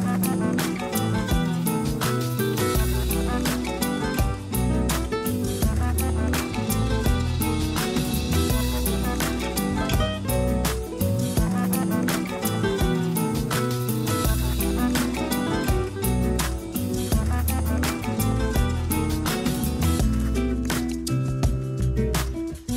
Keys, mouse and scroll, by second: 1.5 click, 2.7-3.9 drag, 3.9 Tab, 5.6 click.